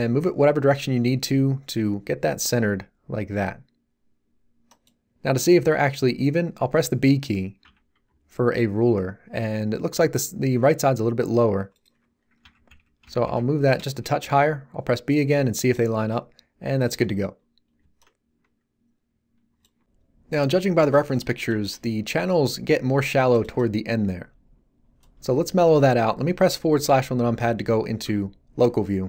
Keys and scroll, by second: 7.6 b, 12.4 g, 12.6 Right, 13.0 Left, 13.8 Return, 14.2 b, 26.8 /.